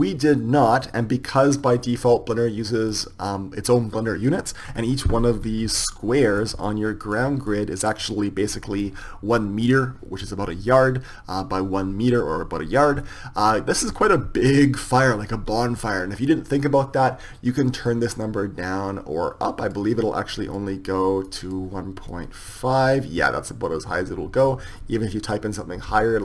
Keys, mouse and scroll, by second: 4.7 middle click, 5.3-10.2 middle drag, 5.3-6.5 scroll up 1, 13.9-15.9 middle drag, 18.8-26.2 drag.